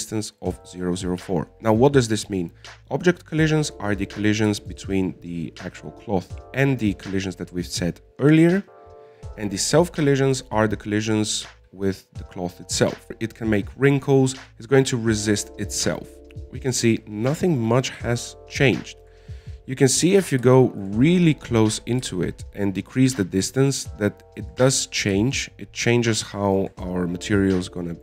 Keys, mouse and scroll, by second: 5.1-5.4 scroll down 1, 5.4-9.0 middle drag, 16.2 alt+a, 16.8 click, 17.5-19.3 middle drag, 19.3-20.0 scroll up 5, 20.1 shift+middle click, 20.6-21.1 scroll up 4, 21.1 middle click, 21.5-21.9 scroll down 1, 21.9-23.4 shift+middle drag, 23.4-25.8 drag, 26.6-27.9 shift+drag.